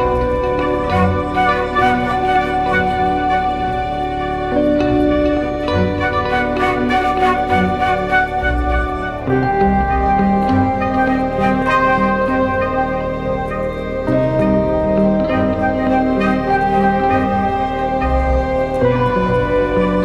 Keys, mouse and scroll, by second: 9.7 alt+click, 17.1 right click, 18.7-20.0 typing.